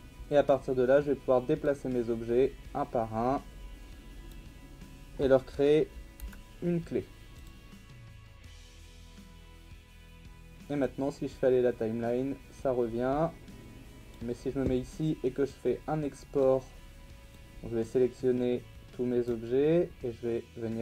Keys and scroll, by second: 6.2 i, 8.3 i, 9.3 i, 10.1 i.